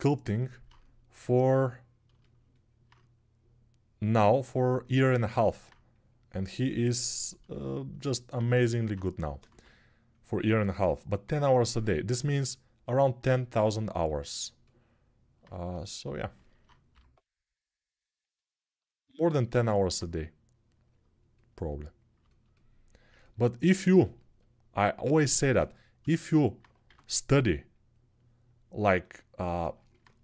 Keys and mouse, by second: 9.3 x, 16.7 g, 24.9-28.9 alt+right drag, 26.6 q, 28.9-30.2 middle drag.